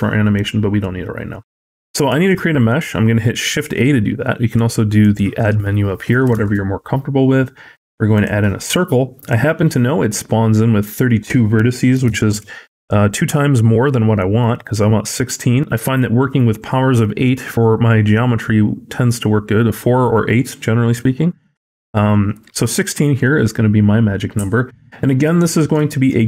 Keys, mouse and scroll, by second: 2.0 shift+a, 4.9 click, 6.2 shift+a, 9.0 click, 10.7 click, 25.1 middle click, 25.7 shift+middle click, 26.0-26.2 scroll up 5.